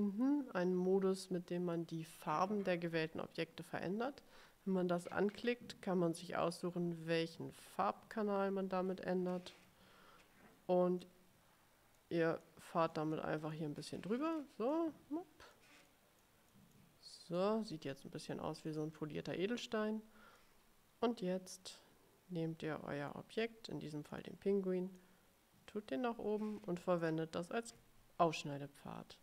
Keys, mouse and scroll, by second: 11.1-12.3 drag, 12.6-13.9 drag, 14.1 click, 14.8-15.9 drag, 16.0 click, 16.7 click, 17.3 click, 18.8 click, 20.5-23.5 drag, 24.3 click, 25.1 click, 27.1 shift+click.